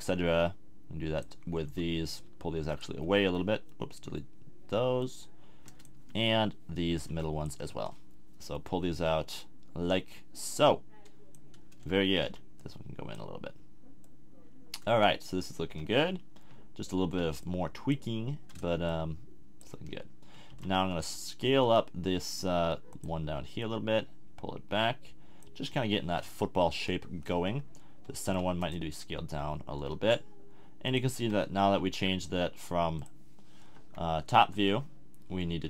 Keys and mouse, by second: 1.6 b, 3.0 b, 5.9 a, 6.9 b, 11.8 a, 12.2 b, 15.7 a, 17.2 b, 19.7 a, 20.6 b, 21.5 s, 25.5 a, 26.7 KP_1, 28.3 b, 29.8 s, 30.9 click, 31.2 g, 33.7 KP_3, 34.5 KP_7.